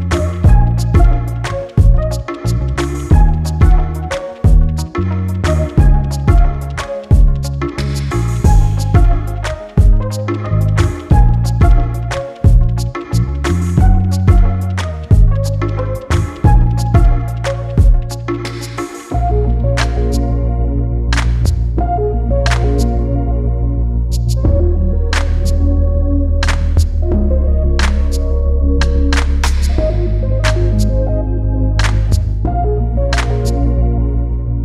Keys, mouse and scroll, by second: 0.4 scroll down 1, 1.3 click, 2.0 Delete, 2.4 click, 3.5 scroll up 1, 3.9 click, 4.3 scroll down 1, 4.5 click, 6.5 g, 8.6 click, 10.5 click, 13.2 scroll down 1, 14.6 click, 16.7 click, 17.6 scroll up 1, 18.8 click, 20.0 ctrl+z, 25.5 g, 26.2 click, 30.3 right click, 30.7 click, 31.4 right click, 31.7-32.1 scroll down 1, 34.2 click.